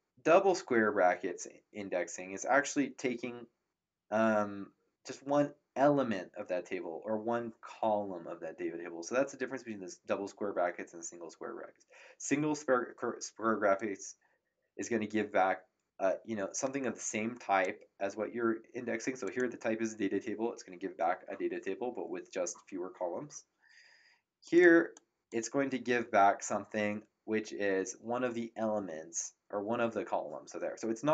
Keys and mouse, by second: 13.7 click, 19.2 click, 24.4 click.